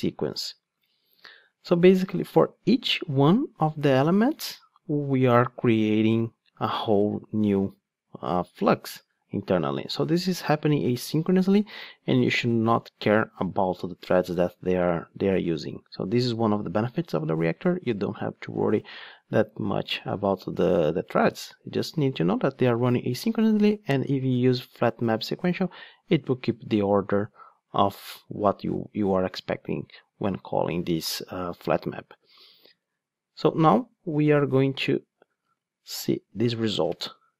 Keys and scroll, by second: 35.5 super+x, 37.0 super+v.